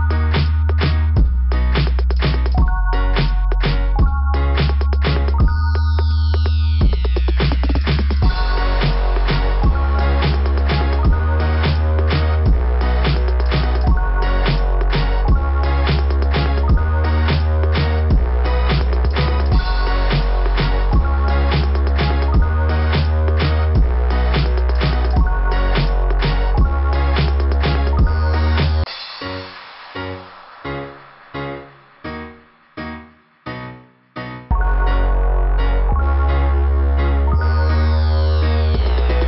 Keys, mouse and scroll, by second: 1.4-2.8 typing, 3.8 typing, 4.8 click, 8.4 click, 10.8 click, 11.1 click, 11.4 click, 11.8 click, 12.1 click, 14.3-15.5 scroll up 8, 16.0 scroll down 1, 16.0 scroll up 1, 16.1 scroll down 3, 16.4 scroll up 2, 16.4 scroll down 3, 16.7 scroll up 1, 16.8 scroll down 1, 19.7 scroll down 2, 21.8 click, 24.6 click, 24.9 click, 25.4 click, 27.1 scroll up 2, 28.2 scroll down 2, 28.4 scroll up 2, 28.5 scroll down 2, 28.7 scroll up 2, 28.8 scroll down 2, 29.3 scroll up 2, 29.4 scroll down 2, 29.6 scroll up 2, 29.7 scroll down 2, 29.9 scroll up 2, 30.1 scroll down 2, 30.1 scroll up 2, 37.4 right click, 38.4 click.